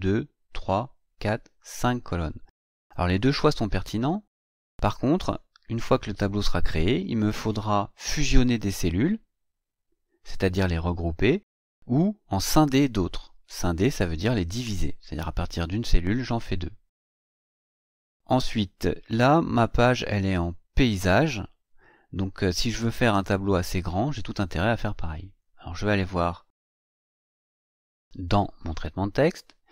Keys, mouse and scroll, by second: 26.6 click, 29.6 click.